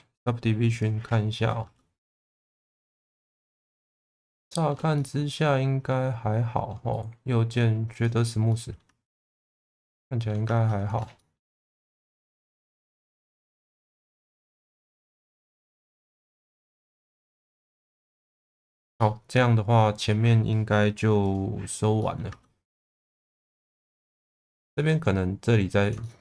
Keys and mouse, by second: 0.7 click, 1.6 Tab, 2.0 middle click, 3.6 middle click, 4.3 shift+middle click, 4.9-6.6 middle drag, 8.5 middle click, 8.8 Tab, 9.5 middle click, 10.4 Tab, 11.1 shift+middle click, 11.6 middle click, 13.2 click, 13.7 Tab, 14.6-18.2 middle drag, 18.9-20.0 middle drag, 21.2 click, 21.9 middle click, 22.3 Tab, 22.6 middle click, 23.1 Tab, 23.9 middle click, 26.0 shift+middle click.